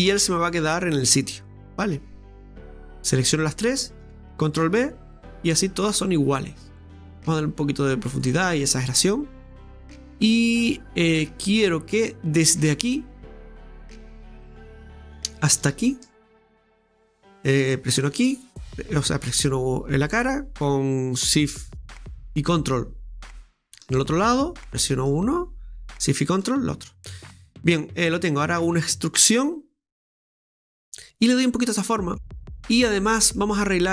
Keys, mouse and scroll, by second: 0.3 scroll down 2, 0.5-2.7 middle drag, 2.7 ctrl+z, 3.2 alt+shift+right click, 3.8 alt+shift+right click, 4.7 ctrl+b, 8.6-11.7 middle drag, 11.9 right click, 13.6 click, 14.5 right click, 14.8-16.4 middle drag, 16.4 ctrl+shift+right click, 18.0 middle click, 18.1 shift+right click, 19.0 shift+right click, 23.5 ctrl+shift+right click, 24.0 middle click, 25.0 shift+right click, 26.2 right click, 26.7 scroll down 2, 26.9-29.4 middle drag, 31.3-32.3 middle drag, 32.3-32.8 scroll up 1, 32.8 middle click, 33.5-33.8 scroll up 2, 33.8-33.9 middle drag.